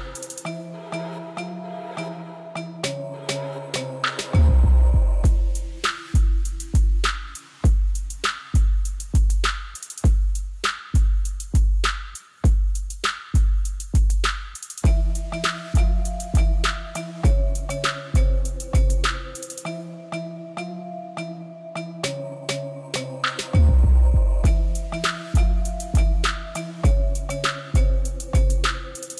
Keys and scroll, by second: 0.0-1.2 typing, 1.5 Return, 9.6 5, 9.8 Return, 10.9 Tab.